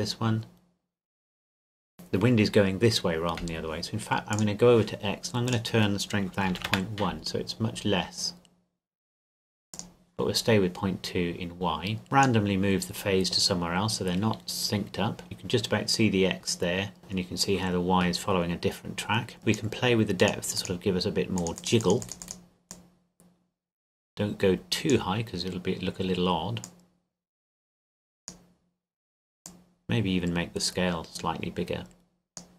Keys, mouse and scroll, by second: 4.3 click, 6.4 KP_Decimal, 6.5 KP_1, 6.7 KP_Enter, 9.7 click, 12.0 click, 17.0 click.